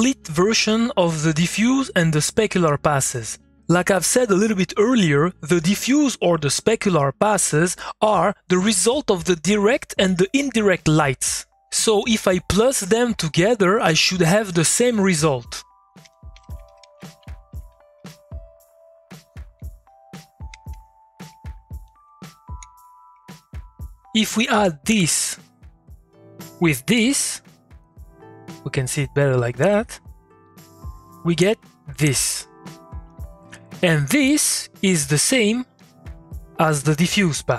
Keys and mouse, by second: 12.0-16.0 drag, 16.0 Tab, 16.1-17.3 typing, 17.5 Down, 18.0 Return, 19.2 click, 20.5 Tab, 21.8 click, 22.4 ctrl+click, 23.6 ctrl+click, 24.8 click, 25.2 2, 26.3 click, 27.7 2, 28.8-30.4 drag, 31.6 click, 32.6 2, 34.8 click, 35.1 middle click, 35.8 click, 36.0 middle click, 36.6 click.